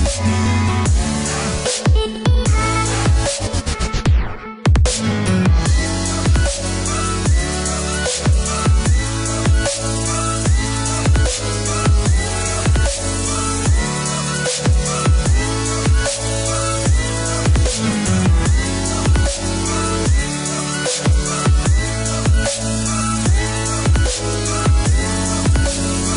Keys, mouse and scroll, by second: 0.5 click, 2.3 click, 3.2 middle click, 5.0 click, 6.2 middle click, 10.5 click, 13.9 middle click, 15.6 click, 18.2 click, 18.6 space, 19.5 click, 20.5 click, 24.4 click.